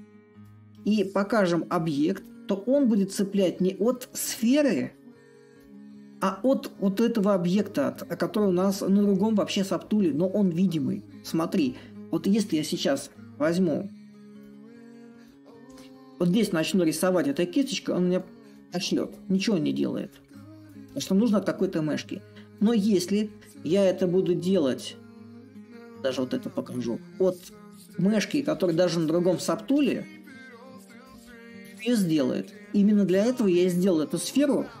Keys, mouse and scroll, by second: 0.0-5.0 drag, 5.1-10.1 drag, 12.5-16.4 drag, 17.0-22.0 ctrl+drag, 22.2-27.2 drag, 29.8-34.8 ctrl+drag.